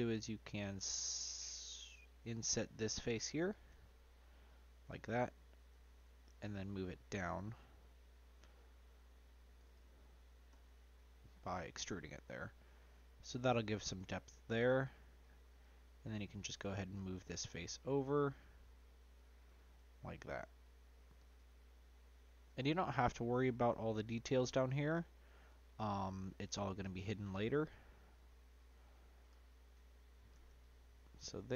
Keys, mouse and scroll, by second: 1.9 ctrl+z, 6.5 g, 10.5 e, 12.3-15.2 middle drag, 15.2 click, 15.6 click, 16.6 click, 19.4 click, 19.8 scroll up 1, 19.9-21.2 middle drag, 21.2-21.7 scroll down 1, 21.7 middle click, 22.6 click, 22.9 scroll up 2, 23.1 middle click, 23.6-24.6 scroll up 1, 24.6 click, 26.4 middle click, 27.0-27.5 scroll down 3, 27.5 middle click, 28.4 click, 28.8 middle click, 30.3 Tab, 30.6 click, 31.1-31.5 middle drag.